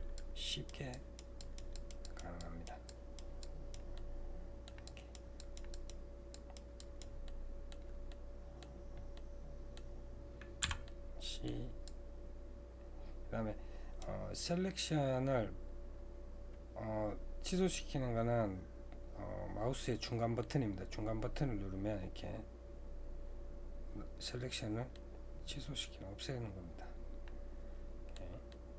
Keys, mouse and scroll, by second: 0.3-4.0 drag, 4.0 middle click, 4.9-7.3 drag, 7.3 middle click, 10.6 c.